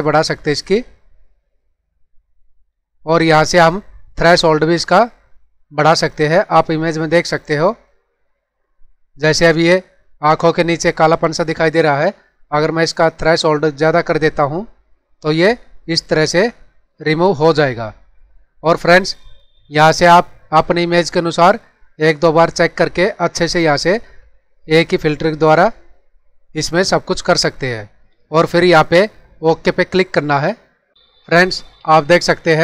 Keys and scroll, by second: 31.8 ctrl+=.